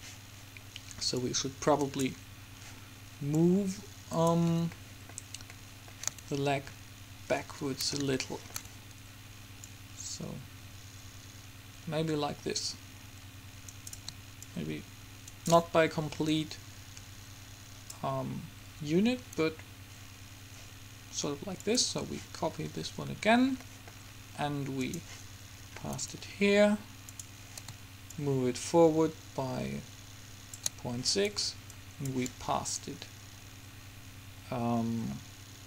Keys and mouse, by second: 1.3-3.0 drag, 3.4-5.2 drag, 5.2 middle click, 9.8-11.7 drag, 14.6-16.1 drag, 16.4-18.4 drag, 21.9-23.4 drag, 23.4 middle click, 24.9-26.8 drag, 27.2-30.3 drag, 31.9-33.7 drag.